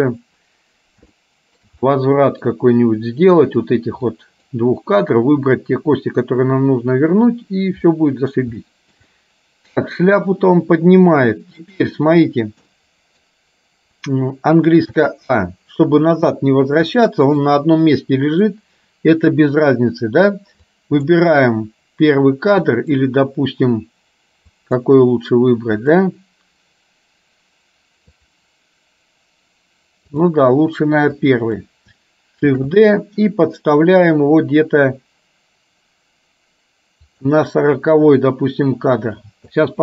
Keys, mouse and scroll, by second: 1.2 shift+middle click, 2.0 middle click, 4.4 click, 8.0 middle click, 8.6 shift+middle click, 11.7 click, 12.9 middle click, 15.1 a, 17.1 middle click, 20.7 click, 22.6 click, 24.6 click, 26.0 click, 28.2 click, 30.4 click, 31.2 click, 32.6 shift+d.